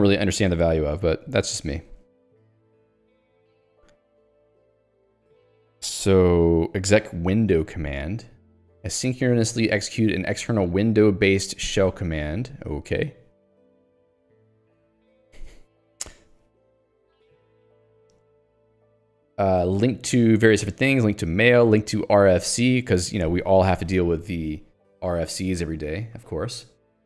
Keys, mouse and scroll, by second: 0.1 click, 2.1 scroll down 3, 2.8 scroll up 1, 3.5-4.2 scroll, 7.7 middle click, 12.7 scroll up 1, 26.9 scroll up 1.